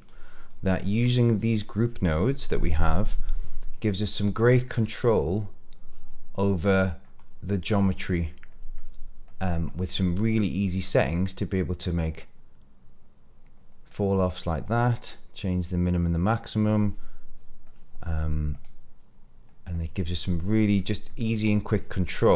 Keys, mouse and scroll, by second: 0.7 scroll down 2, 1.0 middle click, 3.5-4.9 middle drag, 5.0-7.1 middle drag, 7.2 scroll down 1, 7.4-8.1 middle drag, 8.4 middle click, 9.2-9.6 drag, 9.8 middle click, 11.0-14.2 drag, 15.0-16.5 drag, 16.7 middle click, 18.5-19.6 drag, 20.2 middle click, 21.0 middle click.